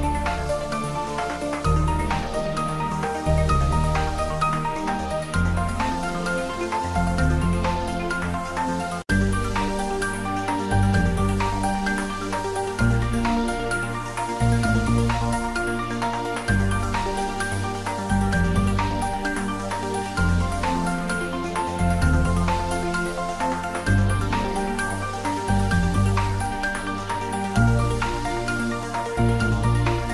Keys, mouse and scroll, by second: 0.8-3.2 drag, 5.7 click, 6.5-7.2 scroll down 1, 7.2-9.0 middle drag, 9.0 click, 11.6-12.0 scroll up 1, 12.1-15.6 drag, 15.6 ctrl+s, 17.9-22.3 drag, 25.5 click, 27.1 click, 27.8 4, 29.4 click.